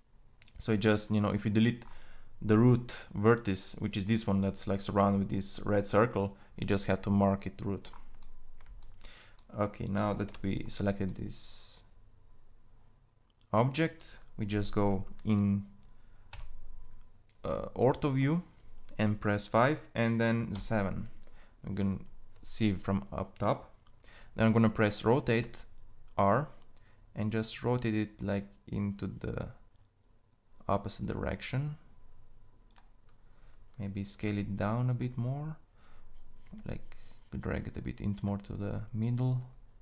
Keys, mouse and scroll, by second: 9.6 Tab, 15.7 KP_5, 19.9 KP_7, 24.7 r, 33.5 s, 35.8 g.